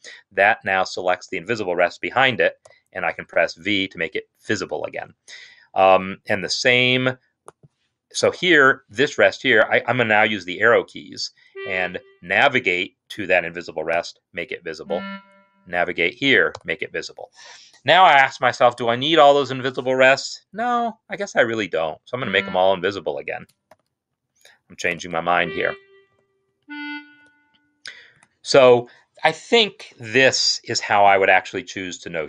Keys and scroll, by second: 2.8 v, 11.4 Right, 12.5 Right, 14.0 v, 14.6 Right, 15.9 Right, 16.4 v, 21.7 v, 21.8 Left, 22.2 v, 23.5 ctrl+z, 24.1 Left, 24.9 v, 25.1 Left, 25.6 Left, 26.0 v, 26.4 Left, 26.6 Left, 27.1 v, 28.0 Escape.